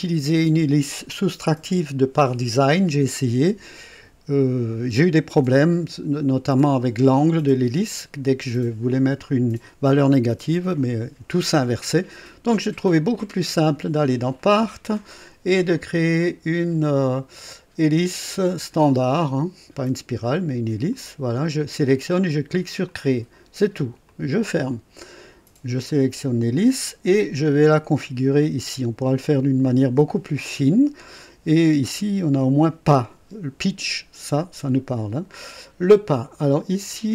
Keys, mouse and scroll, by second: 14.5 click, 16.1 click, 18.0 click, 20.8 click, 22.8 click, 24.0 click, 25.8 click, 27.5 click, 36.8 click.